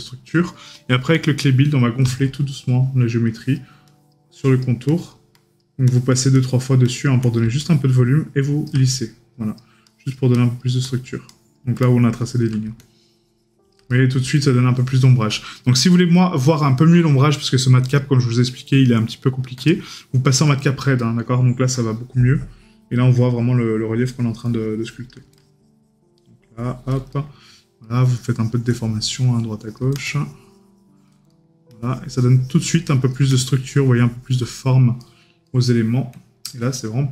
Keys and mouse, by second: 0.4 right click, 2.6 right click, 14.0 right click, 15.6 right click, 20.5 right click, 27.2 right click, 31.4 right click.